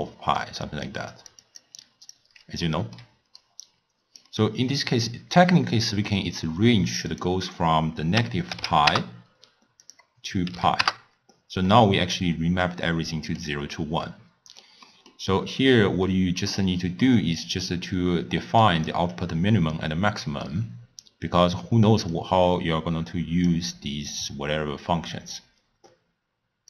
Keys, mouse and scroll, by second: 0.0-3.0 typing, 0.7 click, 1.2 click, 1.5 click, 1.9 click, 2.7 middle click, 3.4 right click, 4.3 d, 4.4 d, 5.9-7.1 middle drag, 7.1-11.8 drag, 11.8-14.8 middle drag, 14.9 middle click, 15.5-16.1 scroll down 1, 16.1-17.5 middle drag, 17.5 click, 22.2-26.2 drag.